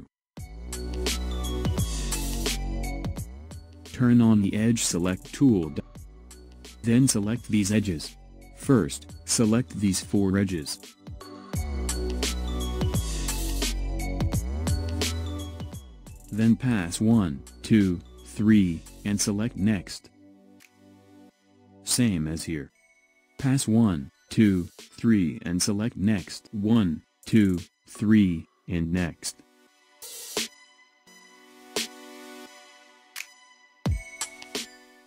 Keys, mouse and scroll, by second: 0.0 scroll up 1, 1.6-4.6 shift+middle drag, 5.4 click, 6.9 click, 8.6 shift+click, 11.4 shift+click, 13.0 shift+click, 19.5 shift+click, 22.6 shift+click, 25.7 shift+click, 28.6 shift+click.